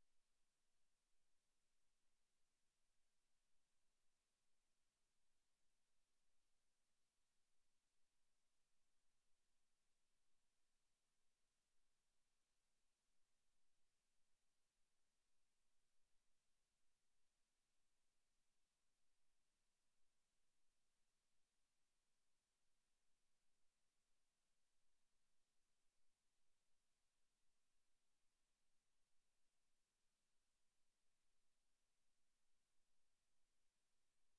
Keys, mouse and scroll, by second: 0.4 click, 1.9 click, 2.7 click, 5.9 click, 7.4 click, 15.8 scroll up 1, 16.4 right click, 18.5 click, 21.4 click, 22.5 click, 24.0 click, 26.4 click, 27.4 click, 30.2 Tab, 31.3 Tab, 34.1 middle click.